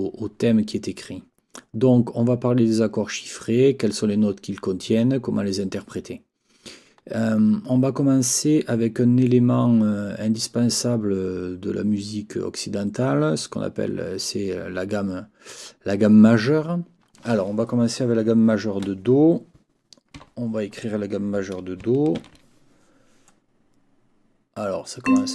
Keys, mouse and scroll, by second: 20.2 n, 25.0 click.